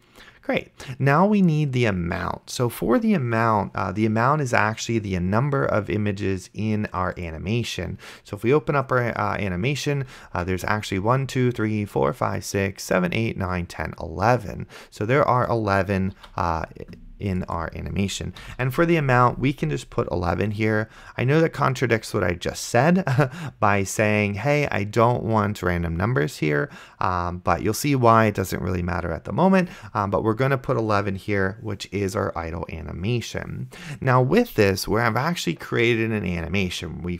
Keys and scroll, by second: 16.5 ctrl+w, 18.4 KP_1.